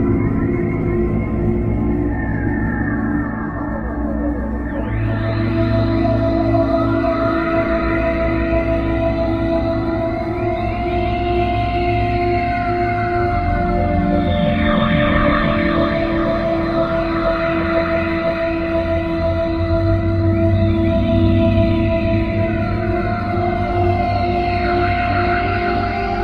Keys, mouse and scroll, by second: 2.0-3.3 scroll down 8, 4.0-5.4 scroll up 8, 5.6-6.7 scroll down 8, 6.7-7.1 scroll up 5, 8.6 middle click, 11.7 click, 14.0 click, 15.6 middle click, 17.9 click, 20.3 middle click, 20.9 middle click, 22.7 middle click, 23.5 middle click, 26.0-26.2 scroll down 9.